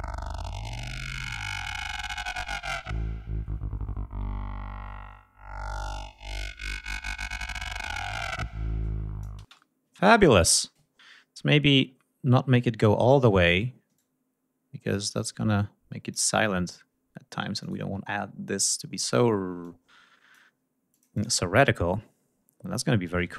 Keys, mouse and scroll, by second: 9.4 space, 17.6 click, 18.6 scroll up 2, 19.6 click, 20.9 click.